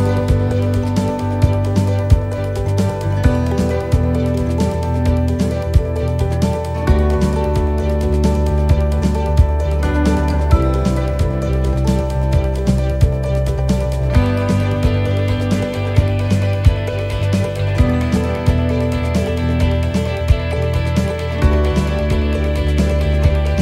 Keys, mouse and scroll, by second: 4.0 click, 5.6 middle click, 6.0 scroll down 3, 6.5 middle click, 7.1 scroll down 1, 7.4 middle click, 7.8 scroll down 2, 9.3 click, 13.7 click, 15.7 scroll up 4, 16.7-17.1 scroll up 1, 17.2 shift+middle click, 18.0 scroll up 1, 18.7 shift+middle click, 19.2-19.6 scroll down 1, 20.2 scroll down 3, 20.5 shift+middle click, 21.7 shift+middle click, 22.7 shift+middle click, 23.3 scroll down 1.